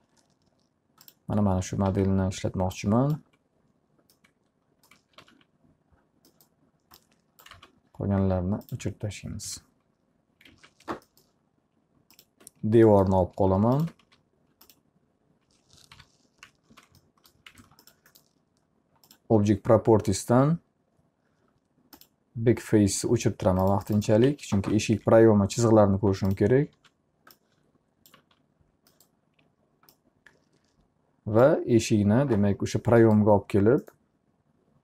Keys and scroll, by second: 1.9 w, 4.9-5.8 typing, 7.6 alt+r, 9.4 g, 10.5 alt+a, 10.8 F3, 14.0 d, 16.0 p, 16.7 z, 17.6 alt+a, 23.7 t, 24.3 z, 24.7 F3, 26.8 w, 28.2 z.